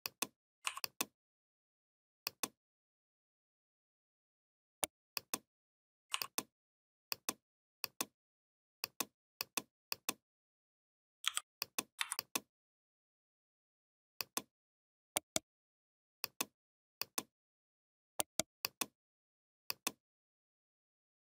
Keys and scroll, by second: 11.0 i, 11.8 v.